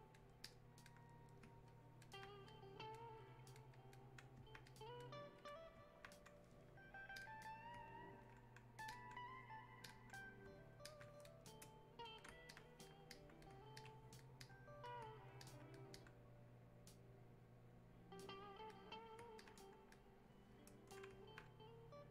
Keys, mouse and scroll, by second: 1.7 alt+click, 2.5-5.4 drag, 10.9 alt+click, 11.5 click, 12.5 alt+click, 13.1 click, 13.9 alt+click, 14.5 click, 16.0-19.4 drag, 19.4-22.0 alt+drag, 22.0-22.1 drag.